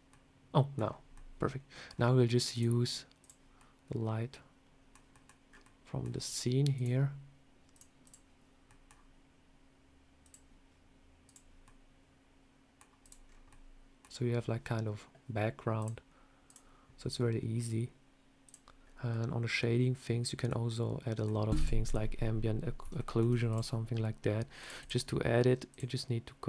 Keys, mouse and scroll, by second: 0.0 middle click, 0.7 scroll down 3, 1.0 middle click, 1.7 scroll down 1, 2.4 click, 3.1 click, 3.4 middle click, 5.0 middle click, 5.3 scroll up 4, 5.5 middle click, 6.6 click, 7.9 click, 8.5 middle click, 10.1 click, 11.1 click, 11.5 middle click, 12.9 click, 13.1 scroll down 3, 13.3 middle click, 15.6 click.